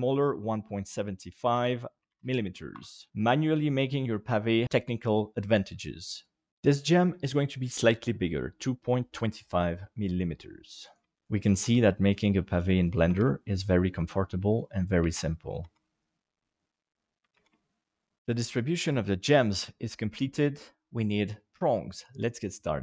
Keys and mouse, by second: 1.2 ctrl+click, 1.9 ctrl+click, 3.1-4.5 middle drag, 6.5 g, 10.8 right click, 11.6 shift+d, 13.1 shift+d, 14.7 middle click, 15.1 shift+middle click, 15.6 shift+d, 17.3 shift+d.